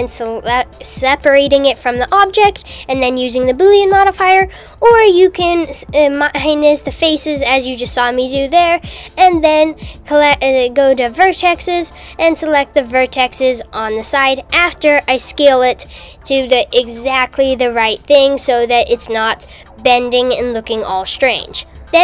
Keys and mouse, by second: 0.3 x, 3.7 click, 3.8 click, 6.7 KP_1, 7.5 KP_2, 7.8 KP_3, 9.5 click, 11.6 s, 19.4 click, 21.8 click.